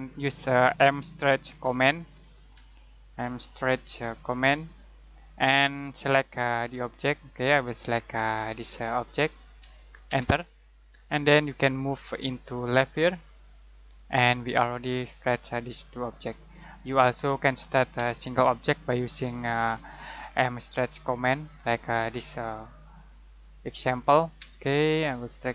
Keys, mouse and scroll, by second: 0.7-3.5 typing, 4.7 click, 10.0 space, 11.8 click, 17.9 space, 19.6 click, 24.3 space, 25.1 click.